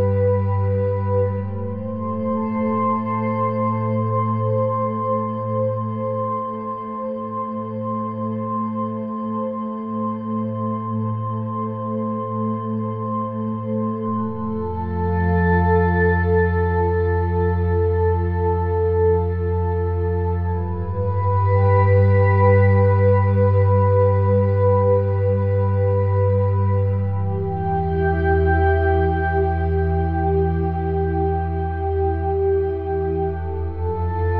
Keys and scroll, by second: 13.6 ], 13.7 [, 25.0 -.